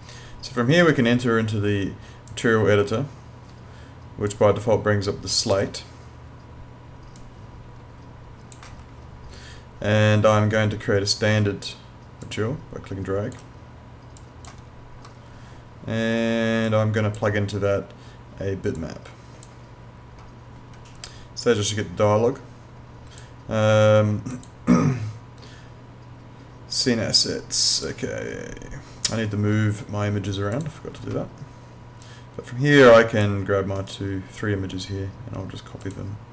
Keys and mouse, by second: 2.3 click, 7.2 click, 12.2 click, 21.7 click, 24.3 click, 27.8 click, 30.6 click, 33.8 right click, 35.8 click.